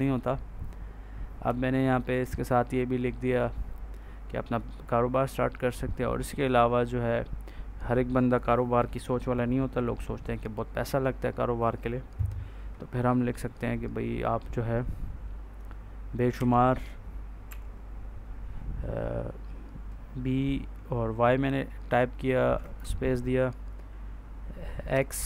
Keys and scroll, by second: 16.2 b, 17.4 y, 22.5 space, 24.8 x.